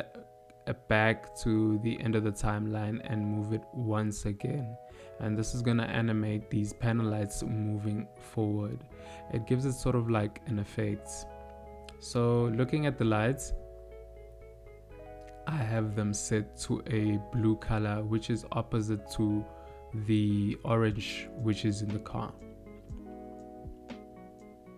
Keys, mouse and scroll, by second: 0.3 click, 1.9 click, 6.0 middle click, 8.6 click, 10.7 click, 12.9 click.